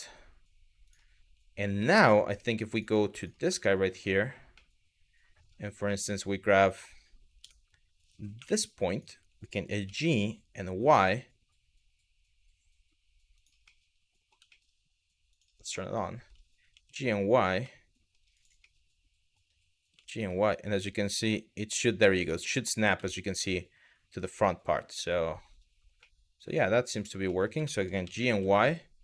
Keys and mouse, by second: 1.3 Tab, 1.8 middle click, 2.0 Tab, 2.4 drag, 3.2-3.6 middle drag, 4.3-5.0 middle drag, 5.6-6.5 middle drag, 7.0 Tab, 8.0 1, 8.5 click, 9.5 g, 13.0 click, 13.3 middle click, 14.1 shift+middle click, 14.9 click, 15.3 middle click, 16.3 g, 16.6 y, 18.2 middle click, 19.6 g, 19.8 y, 21.6 click, 22.0 middle click, 22.7 middle click, 23.1 middle click, 24.2 middle click, 25.6 middle click, 26.5 click, 26.9 middle click, 27.3 shift+middle click, 27.7 g, 27.9 y.